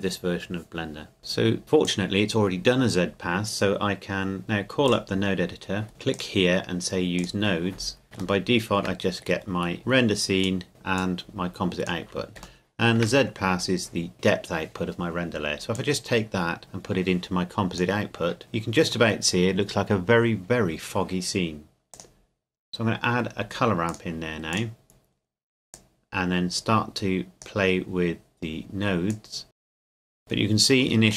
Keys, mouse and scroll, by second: 1.6 click, 4.8 click, 5.9 scroll down 1, 6.1 click, 7.9 scroll down 1, 8.4 shift+middle click, 9.2-10.0 scroll up 1, 10.4 click, 11.0 click, 12.6 shift+middle click, 13.2-14.1 scroll up 1, 14.1-15.1 scroll down 1, 15.7 click, 18.4-20.2 scroll down 1, 21.9 click, 30.2 scroll up 1.